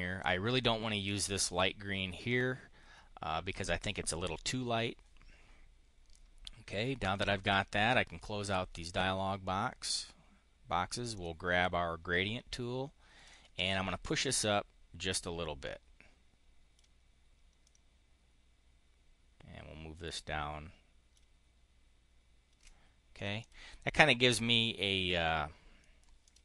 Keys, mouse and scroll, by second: 6.9 click, 7.6 click, 11.0 click, 13.1-16.8 ctrl+drag, 17.4-21.2 ctrl+drag, 23.0 click, 25.0 click, 26.0 click.